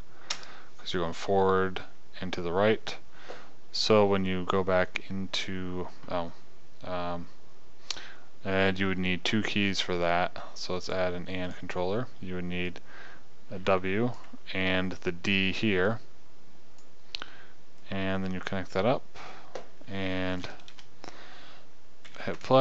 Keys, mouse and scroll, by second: 11.3-15.2 drag, 16.0 click, 16.4 click, 21.1 KP_0, 22.5 p.